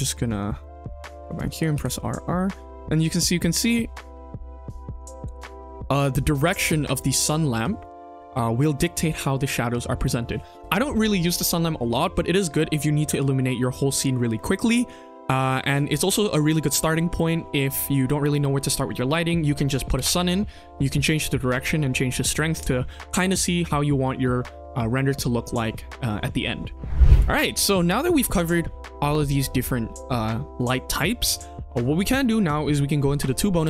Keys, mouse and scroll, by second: 0.1 middle drag, 0.5-0.9 shift+middle drag, 1.1 middle drag, 1.5 r, 6.6 shift+middle drag.